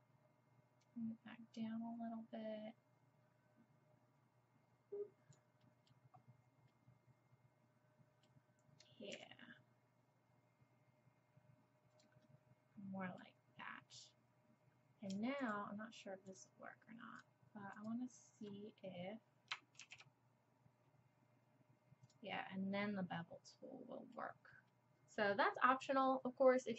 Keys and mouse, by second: 0.8 click, 5.7 middle click, 6.4 click, 7.0 middle click, 7.3 middle click, 9.1 s, 12.3 click, 12.8 click, 13.0-19.8 drag, 19.8 ctrl+b, 22.4 click, 22.7 click, 23.0 click, 23.6-24.8 middle drag, 24.8 click, 24.9 middle click.